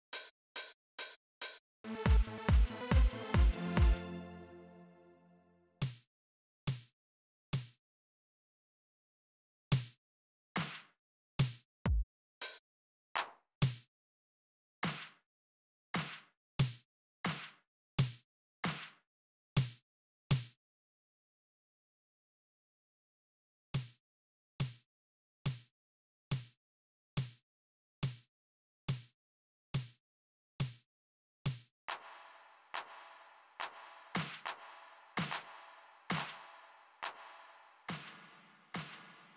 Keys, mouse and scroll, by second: 0.3 right click, 1.3 click, 3.6 click, 5.5 click, 7.6 click, 9.4 click, 10.3 click, 11.6 click, 12.0 click, 12.9 click, 13.3 click, 14.6 click, 15.1 click, 15.7 click, 16.4 click, 17.0 click, 17.6 click, 18.3 click, 20.0-22.3 drag, 23.5 click, 30.7 right click, 31.5 click, 33.9 click, 34.9 click, 35.8-37.8 drag.